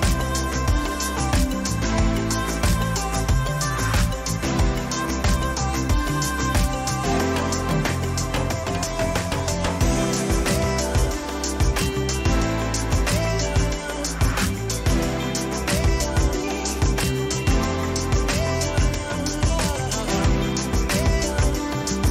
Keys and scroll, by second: 2.5 Return, 9.3 Down, 11.1 Up, 11.3 Down, 16.1 Up, 20.2 Down.